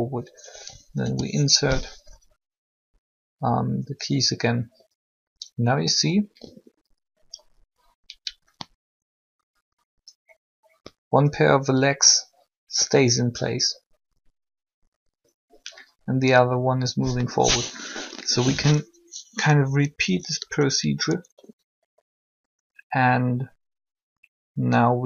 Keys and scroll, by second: 2.1 i, 18.1 3, 19.6 Up.